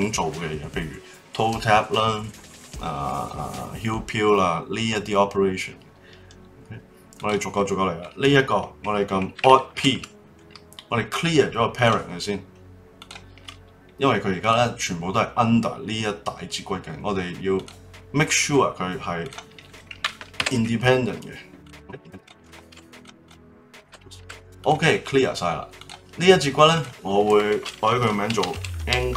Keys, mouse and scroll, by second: 6.1-7.1 scroll up 3, 7.1 click, 7.6-9.7 middle drag, 9.7 alt+p, 12.9 click, 14.4 click, 17.5 click, 19.2 click, 20.3 alt+p, 22.1 click, 22.7 alt+p, 23.2 click, 23.8 alt+p, 24.2 alt+p, 25.8 click, 26.5 click, 26.7-29.1 drag.